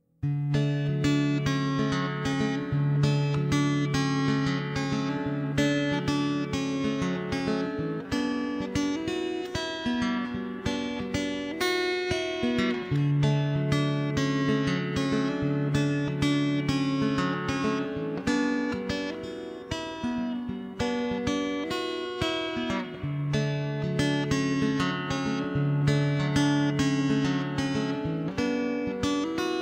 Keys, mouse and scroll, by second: 0.3 click, 0.9 middle click, 1.3 middle click, 2.2 middle click, 3.4 middle click, 3.6 right click, 4.0 middle click, 4.3 ctrl+z, 4.5 ctrl+z, 4.5 right click, 4.6 middle click, 5.3 click, 5.4 right click, 5.7-8.3 typing, 5.8 middle click, 6.2 right click, 6.4 click, 7.5 click, 7.5 right click, 8.7 ctrl+s, 8.9 ctrl+KP_3, 9.1 Tab, 10.0 middle click, 10.4 right click, 10.7 middle click, 11.4-13.2 right drag, 11.9 middle click, 13.0 middle click, 13.4 right click, 14.4 middle click, 15.1 middle click, 15.3 shift+space, 15.4 shift+space, 15.6 middle click, 16.0 ctrl+b, 16.7 middle click, 17.0 ctrl+shift+b, 17.5 click, 17.9 KP_0, 18.1 middle click, 19.1 middle click, 19.9 Tab, 20.1 middle click, 20.4 shift+space, 21.0 click, 21.2 shift+space, 22.2 Tab, 22.5 a, 22.9 c, 23.4 ctrl+KP_3, 23.9 ctrl+,, 24.1 r, 25.0 middle click, 25.5 ctrl+l, 25.8 ctrl+KP_3, 26.1 r, 27.0 middle click, 27.2 Tab, 27.4 middle click, 27.5 alt+c, 27.9 shift+space, 28.5 click.